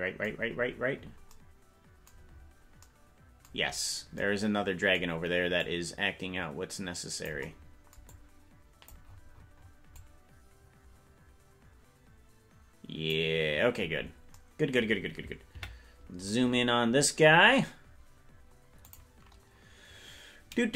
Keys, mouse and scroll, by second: 0.4-0.9 scroll down 10, 1.3-2.2 scroll down 10, 2.2-2.8 scroll up 6, 3.7 scroll up 2, 5.6-7.4 drag, 8.1 click, 9.3-10.0 scroll down 5, 10.0-13.2 drag, 10.0-12.4 scroll down 1, 13.5-14.3 scroll down 1, 14.3-14.7 scroll down 1, 15.5 KP_Decimal, 18.9 click.